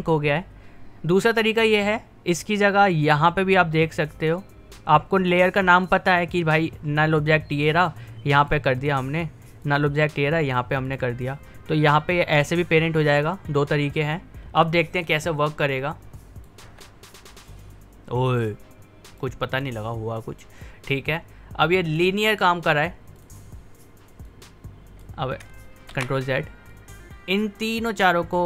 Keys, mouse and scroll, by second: 2.3 click, 5.2 typing, 8.4 click, 15.8 click, 16.1-16.6 typing, 18.4-25.9 drag, 19.2 typing, 22.5 typing, 25.9 ctrl+z, 26.7-28.4 drag.